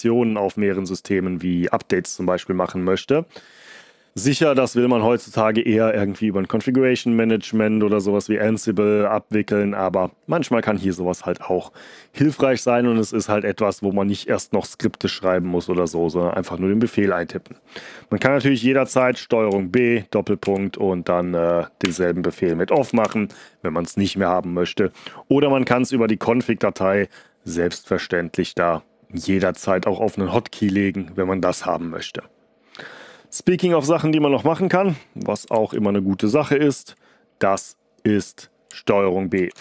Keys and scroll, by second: 18.9 ctrl+b, 19.7 shift+., 20.4 Up, 21.8-22.8 typing, 23.0 Return, 35.5 ctrl+d, 39.3 ctrl+b.